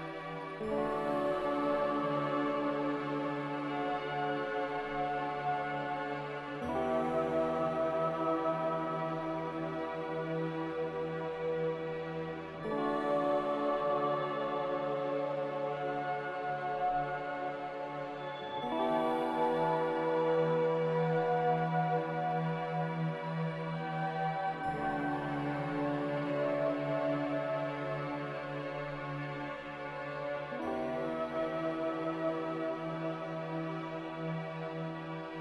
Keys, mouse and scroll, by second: 1.3-2.1 typing, 4.4-5.3 typing, 6.9-7.6 typing, 13.1 c, 22.7 a, 23.5 q, 28.6 z, 28.9 click, 29.3 click, 31.3-32.1 typing.